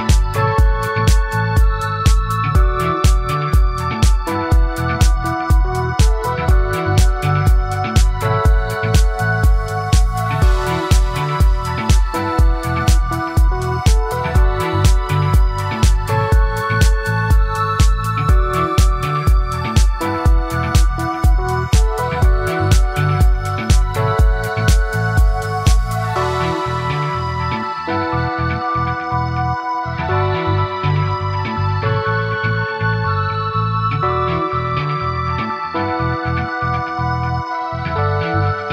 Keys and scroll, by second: 3.9 ctrl+shift+z, 20.0 ctrl+a, 20.5 ctrl+c, 23.5 ctrl+v.